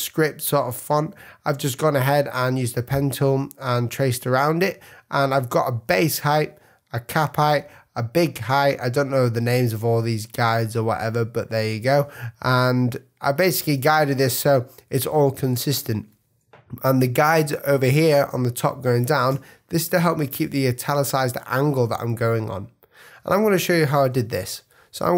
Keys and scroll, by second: 0.5 space, 2.2 v, 3.6 a, 5.3 space, 13.2 space, 17.7 super+space, 18.7 space, 19.3 space, 22.2 space, 23.7 super+-.